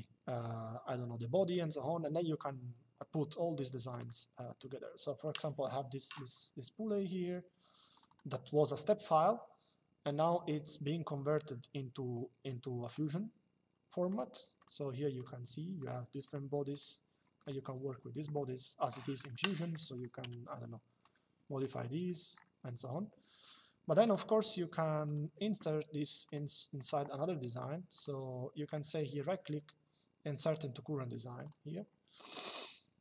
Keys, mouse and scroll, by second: 3.7 click, 5.4 click, 7.6 click, 12.6 click, 13.8 click, 19.2 click, 19.9 q, 21.5 Escape, 23.7 click, 25.9 click, 26.5 right click, 27.6 click, 28.4 right click, 31.1 click.